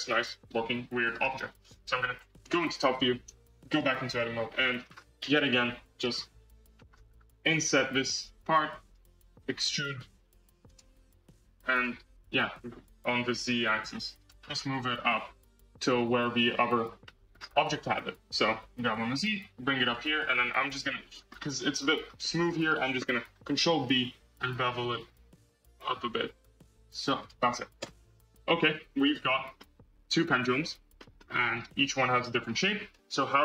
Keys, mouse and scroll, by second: 1.8 KP_7, 2.4 Tab, 2.9 scroll up 2, 3.6 click, 4.1-4.7 middle drag, 4.7 scroll down 4, 5.4 KP_1, 6.0-6.7 scroll down 3, 6.7-7.0 scroll up 7, 7.4 i, 9.5 e, 11.2 e, 14.3 scroll, 15.6 click, 16.2 scroll, 16.9 shift+middle click, 17.3 scroll, 18.2 g, 20.5 scroll, 20.7-21.2 middle drag, 21.2 scroll, 22.1-23.6 shift+middle drag, 23.6 ctrl+b, 27.7 Tab, 28.0-29.0 scroll down 13, 29.0 scroll up 1, 29.0-29.5 scroll down 6, 29.5 scroll up 1, 29.5-30.5 middle drag, 30.5 Tab, 30.9 middle click, 31.1 Tab, 31.1 scroll down 1, 31.5-32.9 middle drag, 32.9 KP_1.